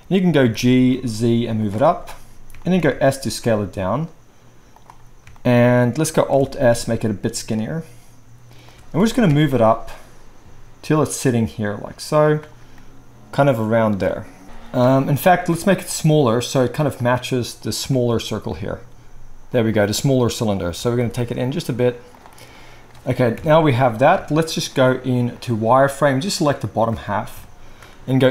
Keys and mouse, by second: 0.4 g, 1.6-2.9 shift+middle drag, 2.9-4.7 drag, 2.9 s, 4.7-25.4 middle drag, 6.6 alt+s, 9.0 g, 14.4 KP_1, 15.5 s, 18.8 s, 20.7 g, 23.3 KP_1, 24.1 z, 25.4-28.3 drag.